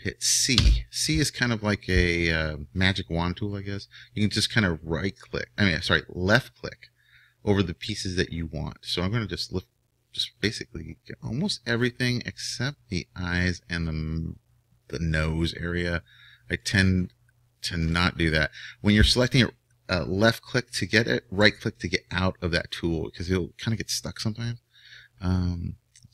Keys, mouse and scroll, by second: 0.5 c.